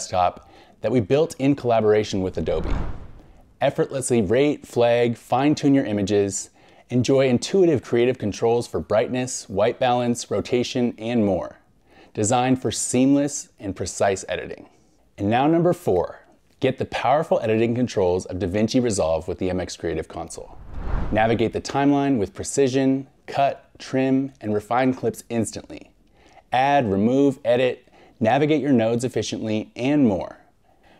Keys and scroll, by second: 2.9 Right, 3.5 2, 4.2 Right, 4.9 Right, 5.8 scroll up 1, 6.6 scroll, 6.8 scroll up 1, 8.1 scroll, 9.5 scroll, 11.4 scroll.